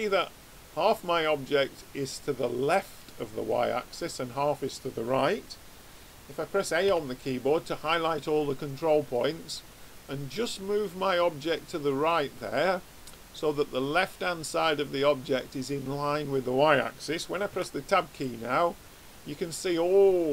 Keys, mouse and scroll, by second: 6.8 a, 9.1 click, 17.6 Tab, 18.2-20.0 drag.